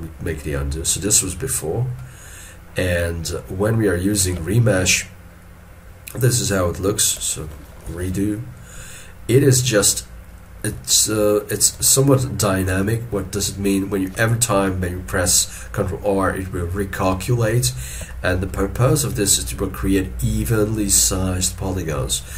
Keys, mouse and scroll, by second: 0.9 middle click, 3.3-6.3 scroll up 1, 7.9 ctrl+shift+z, 11.9 shift+middle click, 12.9 shift+middle click, 17.3 shift+middle click, 18.2 shift+middle click.